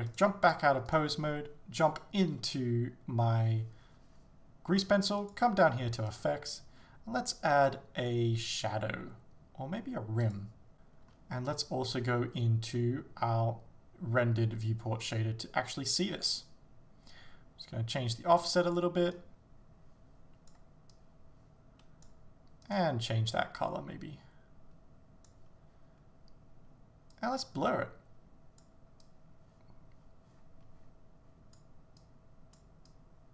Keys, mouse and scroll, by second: 0.5 click, 0.9 right click, 10.4-23.6 drag, 10.7 shift+z, 11.5-13.1 scroll up 2, 27.4-33.3 drag.